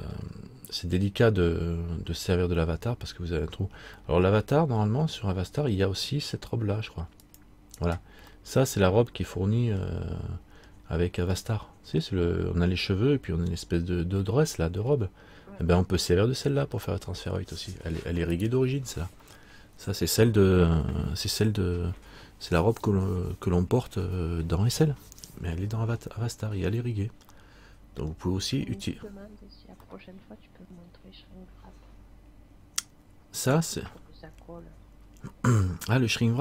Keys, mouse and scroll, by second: 4.2 middle click, 7.4 click, 9.8 middle click, 10.8-11.4 scroll down 1, 11.5 middle click, 14.7 middle click, 15.0-17.5 scroll down 1, 18.5 right click, 27.5 middle click, 28.9-29.9 scroll up 1, 29.9 scroll up 2, 30.1 middle click, 35.0-35.6 scroll down 1.